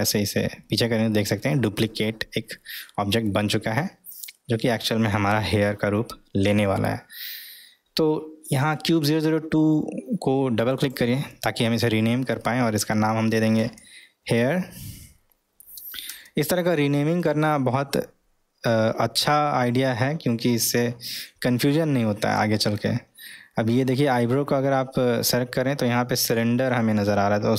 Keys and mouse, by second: 10.6 click, 10.8-17.3 drag, 19.2 click, 22.3-22.8 middle drag.